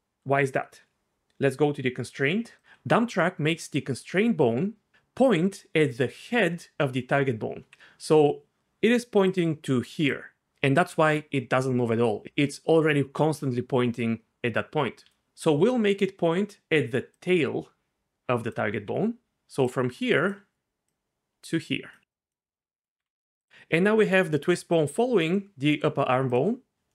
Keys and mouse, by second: 2.6 click, 2.6 d, 3.0-4.9 d, 8.6-10.4 d, 11.6-17.1 middle drag, 15.0 d, 17.1-18.5 drag, 18.5 middle click, 18.8-22.9 d, 19.6 click, 24.3 r, 26.3 click.